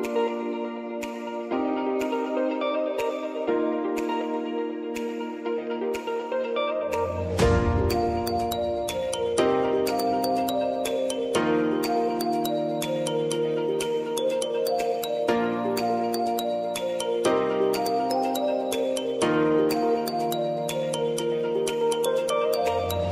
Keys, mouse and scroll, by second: 4.1 shift+g, 4.8 shift+l, 5.2 shift+a, 5.8 shift+s, 7.3 Return, 8.2-11.6 typing, 12.6 ctrl+a, 13.7-16.7 drag, 19.8 click, 22.9 ctrl+alt+Home.